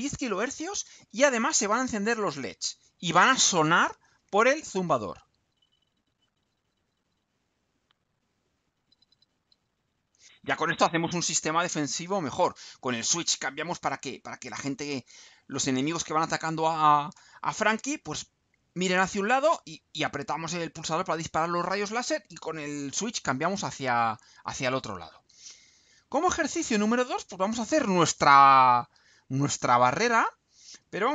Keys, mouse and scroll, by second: 5.0 click, 11.1 click, 24.5 click, 25.8-26.4 scroll down 4.